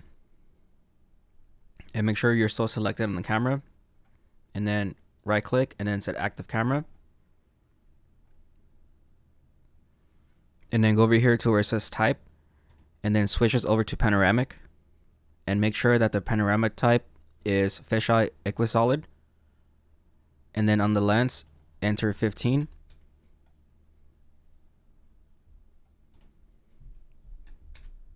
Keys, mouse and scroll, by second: 2.0 click, 6.2 right click, 7.1-7.8 scroll up 5, 9.5-10.5 scroll down 2, 14.2 click, 22.8 click, 27.7 click.